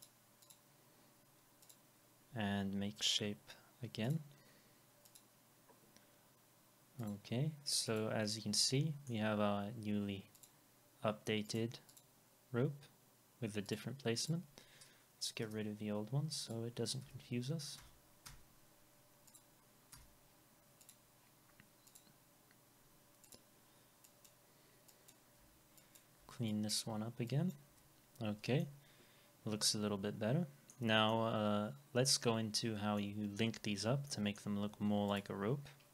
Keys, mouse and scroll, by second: 0.4 double click, 11.9 double click, 15.4 Delete, 25.4 Delete, 28.6 alt+middle click, 31.1 alt+middle click, 33.0 alt+middle click, 34.1 alt+middle click, 35.8 scroll up 1.